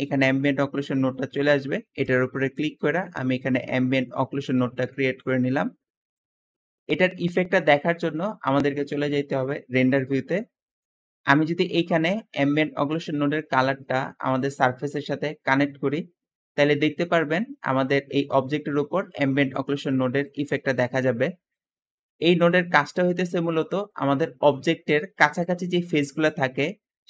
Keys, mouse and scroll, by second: 13.3-15.2 drag.